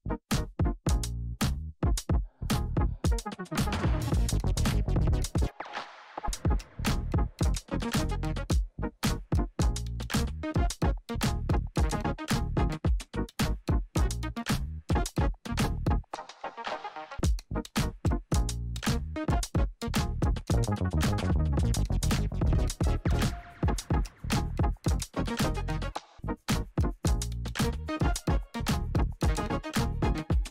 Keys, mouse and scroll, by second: 1.1 Return, 3.4-22.1 drag, 24.9 click, 25.8-27.3 typing, 28.4-30.5 drag.